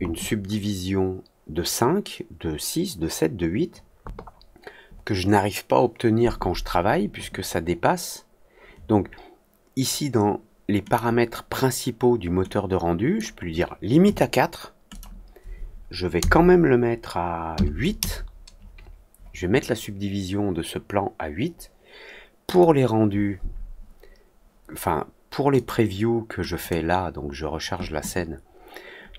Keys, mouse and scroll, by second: 10.8 click, 12.4 click, 14.8 click, 22.4 click, 25.5 click, 26.5 click.